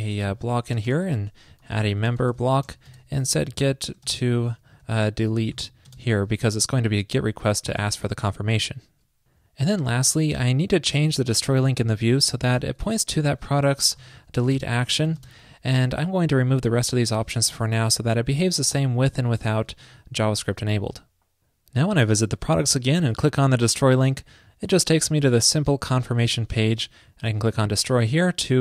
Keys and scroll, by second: 7.0 super+Tab, 7.9 super+s, 12.8 alt+shift+Right, 13.5 alt+Left, 19.9 super+x, 20.3 super+s.